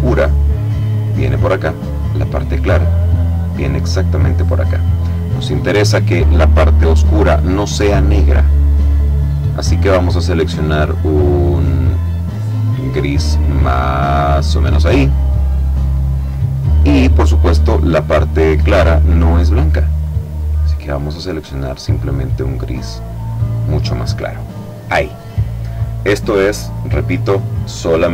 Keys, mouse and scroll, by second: 1.7-4.7 drag, 5.2 click, 9.2-12.2 drag, 12.9-14.6 drag, 18.2 click, 20.0-23.3 drag.